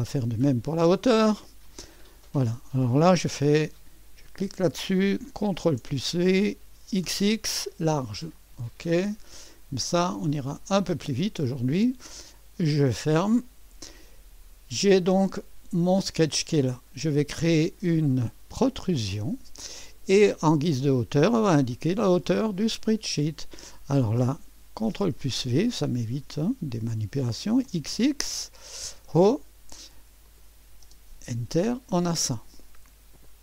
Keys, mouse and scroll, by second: 1.6 click, 4.3 click, 5.5 ctrl+v, 6.8 typing, 8.3 click, 9.5 click, 10.3 click, 12.4-17.8 drag, 18.6-21.8 drag, 22.2-24.4 drag, 24.8 ctrl+v, 27.6 typing, 29.0 click, 30.2 click, 30.8 Return, 33.2 click.